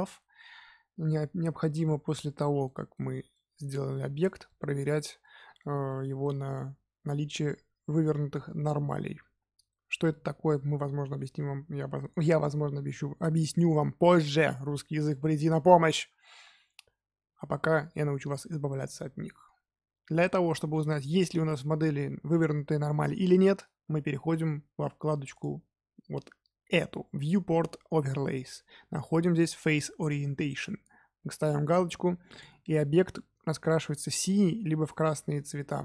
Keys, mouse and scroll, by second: 2.6-14.3 middle drag, 20.8-23.8 middle drag, 25.3-28.5 drag, 32.3 click, 33.1-35.8 middle drag.